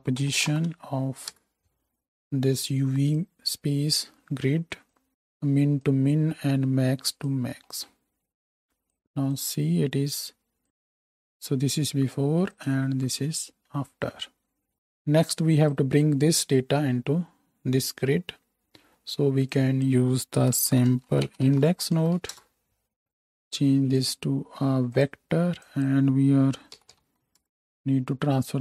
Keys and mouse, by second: 3.1-4.9 drag, 10.6 m, 12.8-15.2 drag, 12.9 m, 23.0-24.0 drag.